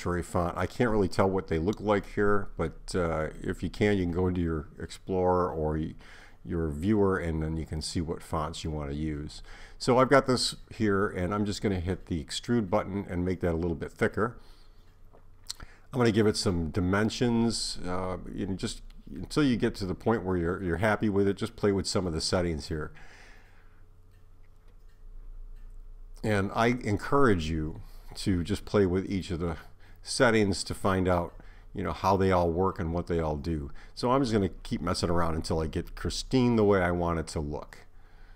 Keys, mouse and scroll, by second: 11.4 click, 14.5 click, 27.2 click, 36.9 click.